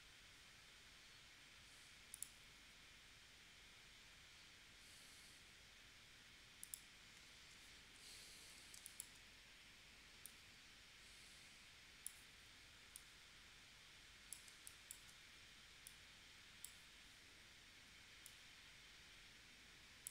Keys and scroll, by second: 7.4 shift+c, 8.8 space, 14.5 space.